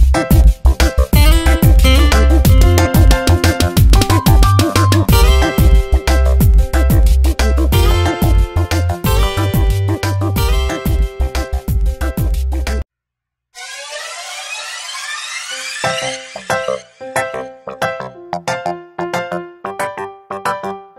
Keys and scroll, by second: 0.4 ctrl+t, 9.1 Return, 11.8 ctrl+t, 13.2 Return, 13.7 shift+Up, 14.1 shift+Left, 16.7 Tab.